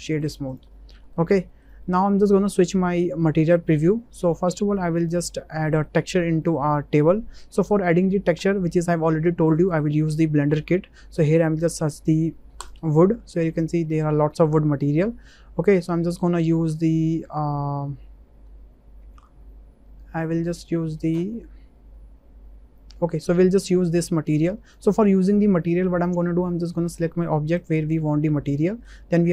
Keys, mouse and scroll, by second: 0.0 click, 0.1 right drag, 1.1 shift+drag, 1.5 middle click, 1.8 shift+middle click, 3.6 click, 4.3 shift+middle click, 4.6 middle drag, 5.0 shift+middle click, 5.6 shift+middle drag, 6.0 middle drag, 6.4 shift+middle drag, 7.5 shift+middle drag, 26.8-27.6 drag, 28.6 middle click.